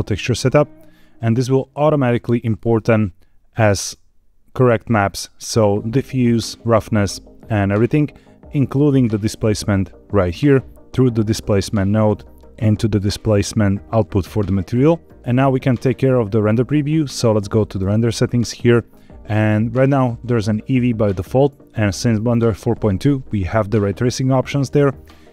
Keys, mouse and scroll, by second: 0.8-3.5 scroll down 4, 3.5 middle click, 8.5 scroll up 3, 9.6 middle click, 11.0 click, 11.8 middle click, 15.1 middle click, 15.1 click, 15.1 scroll down 1, 15.9 scroll down 2, 16.2 middle click, 17.8 click.